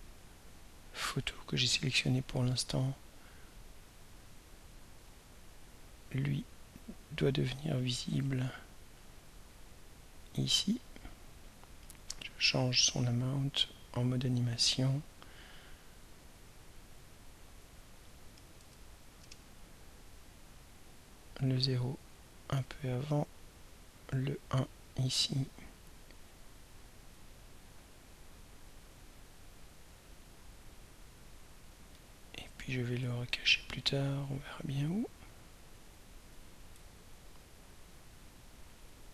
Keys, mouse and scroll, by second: 14.6 click, 16.7 click, 17.5 click, 18.6 0, 19.2 Return, 21.4-23.2 drag, 24.1-25.9 drag, 27.0 click, 28.2 click, 28.9 click, 31.1-36.5 drag, 36.8 right click, 39.0 click.